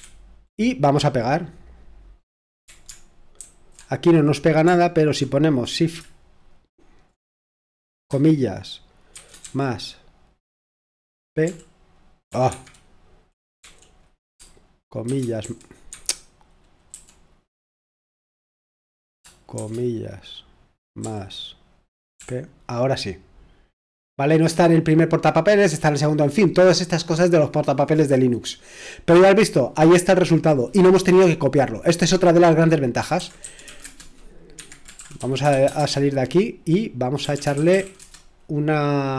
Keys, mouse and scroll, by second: 3.4 ctrl+alt+v, 9.1 typing, 11.4 typing, 12.3 Escape, 12.5 Escape, 13.4-15.4 typing, 15.9 Escape, 16.7-17.4 typing, 19.6 typing, 32.9-35.5 typing, 34.6 Escape, 35.8 Return, 37.0-38.3 typing.